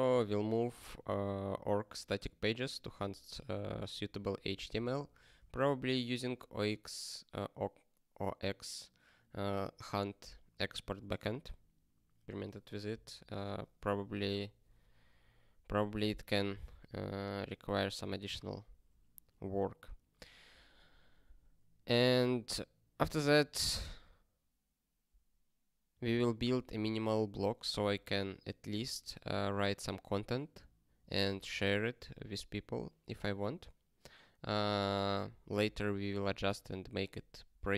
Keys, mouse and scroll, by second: 0.2 ctrl+n, 0.6 ctrl+space, 0.8 ctrl+e, 4.7 ctrl+g, 5.4 ctrl+a, 22.2 ctrl+n, 23.0 ctrl+space, 23.2 ctrl+n, 25.9 ctrl+g, 26.5 ctrl+space, 26.7 ctrl+p.